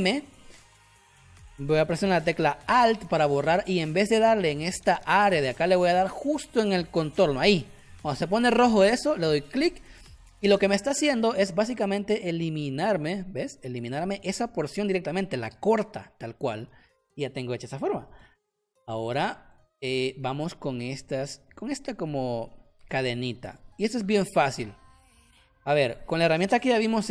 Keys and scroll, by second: 10.5 v, 16.6 ctrl+z, 18.5 z, 19.2 space, 24.0 space, 26.9 <.